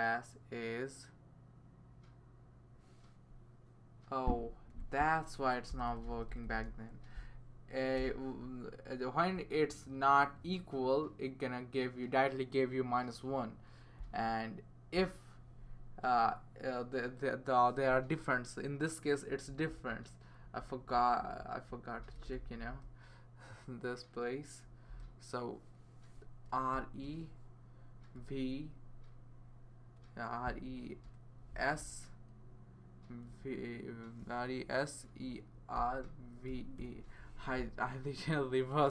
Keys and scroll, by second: 4.8 Right, 5.7-6.6 typing, 8.0 BackSpace, 19.3 Left, 19.5 Left, 19.7 Left, 20.4 Left, 20.9 Right, 21.2 Right, 21.4 Right, 21.5 Right, 22.0 BackSpace, 22.2 BackSpace, 24.9 BackSpace, 26.7 e, 28.1 v, 31.0 s, 33.2 e, 35.7-37.3 typing.